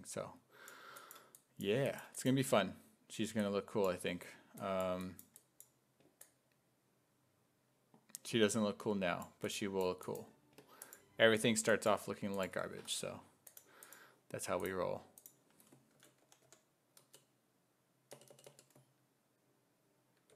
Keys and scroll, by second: 15.7-17.0 typing, 18.1 BackSpace, 18.3 BackSpace, 18.5 BackSpace.